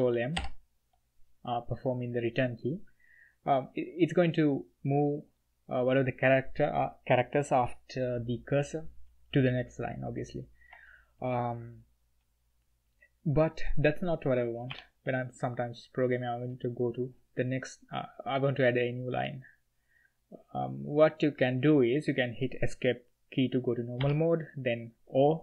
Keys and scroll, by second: 0.3 ctrl+m, 14.7 ctrl+h, 24.0 Escape.